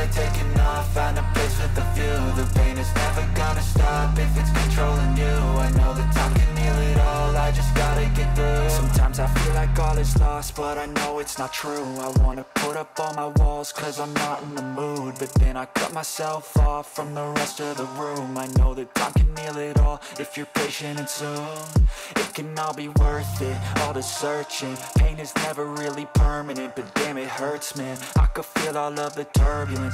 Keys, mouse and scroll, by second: 0.5 click, 1.8 click, 2.3 middle click, 2.3 alt+right click, 2.3-3.0 scroll down 5, 3.0 middle click, 3.6 middle click, 4.6 click, 4.9 middle click, 5.7 scroll down 1, 6.0 shift+middle click, 6.8 middle click, 7.3 click, 9.8 click, 9.9 click, 10.5 click, 11.0 middle click, 11.9 click, 12.1 click, 13.0 middle click, 14.8 middle click, 15.7 g, 16.1 click, 19.0-20.5 middle drag, 20.8 middle click, 21.7 click, 22.3 middle click, 22.7-23.8 scroll down 3, 23.4 middle click, 24.3-27.2 shift+middle drag, 24.5 click, 27.6 middle click, 28.3 click, 29.2 right click, 29.6 middle click.